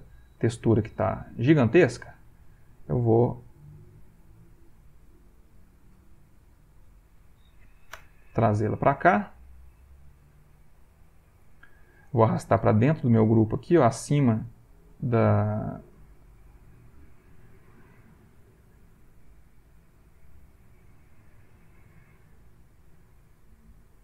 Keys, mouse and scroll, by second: 0.6 ctrl+middle click, 2.2 click, 3.6-5.8 drag, 6.1 shift+click, 7.0 click, 8.0 Return, 10.6-12.1 ctrl+middle drag, 12.8-14.1 drag, 16.9 click, 18.5 click, 19.9-21.6 drag.